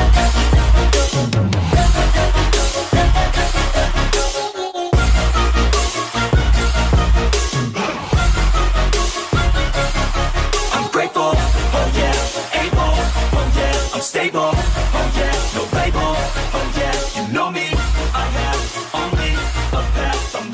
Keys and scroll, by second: 5.8 ctrl+d, 8.6 ctrl+g, 12.8 ctrl+u.